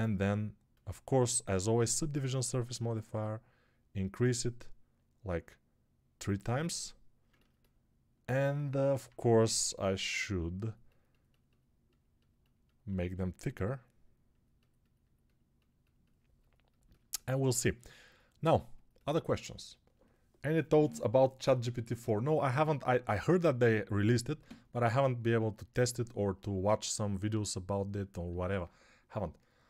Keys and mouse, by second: 9.4 g.